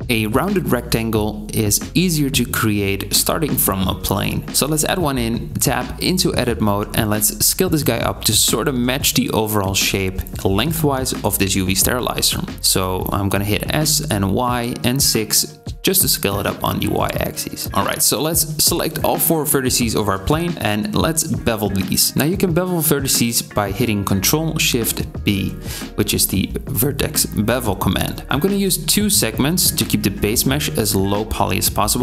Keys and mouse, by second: 3.1 shift+a, 5.7 Tab, 6.2 x, 6.7 Tab, 12.6-18.1 drag, 12.8 s, 17.7 1, 18.1-25.5 middle drag, 22.5 ctrl+shift+b.